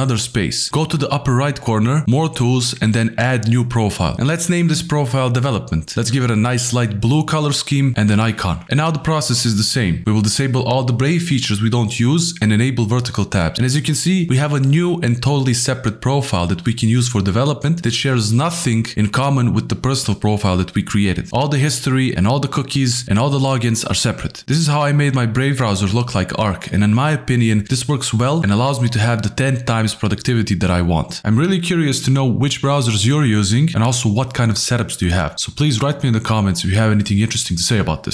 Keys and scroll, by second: 10.7 alt+shift+f, 12.5 alt+shift+f, 14.4 alt+shift+f, 17.5 ctrl+t, 18.0 ctrl+w, 18.1-21.5 typing, 22.3 ctrl+Tab, 22.7 ctrl+shift+a, 22.7-23.6 typing.